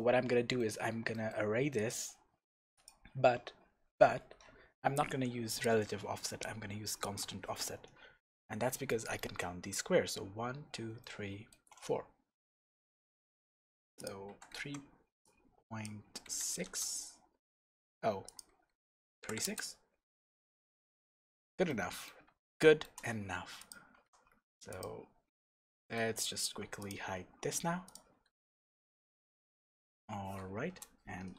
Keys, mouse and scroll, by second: 1.7-5.6 drag, 3.8-4.1 scroll down 1, 7.0 click, 8.4-14.0 middle drag, 14.0-20.7 drag, 16.7 KP_Enter, 19.5 KP_Enter, 20.4-20.7 scroll down 2, 20.7-23.5 middle drag, 21.5 scroll down 1, 22.1-22.4 scroll down 1, 23.5 click, 23.9 g, 24.8 click, 25.0-25.4 scroll down 1, 25.4 Tab, 25.7-26.8 middle drag, 26.1 Tab, 26.8 click, 27.2 h, 27.8 click, 28.1-28.5 scroll up 2, 28.5-31.3 middle drag, 28.8-29.4 scroll down 2, 29.4 scroll down 1, 30.6 KP_0.